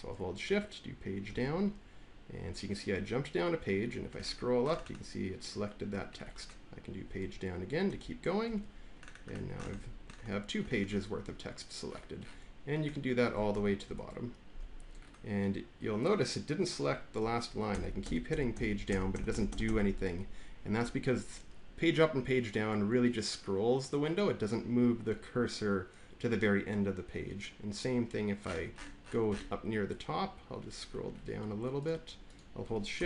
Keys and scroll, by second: 1.2 Page_Down, 7.7 Page_Down, 13.7 Page_Down, 17.6 Page_Down, 18.2 Page_Down, 18.4 Page_Down, 18.8 Page_Down, 19.0 Page_Down, 19.2 Page_Down, 19.4 Page_Down, 19.6 Page_Down.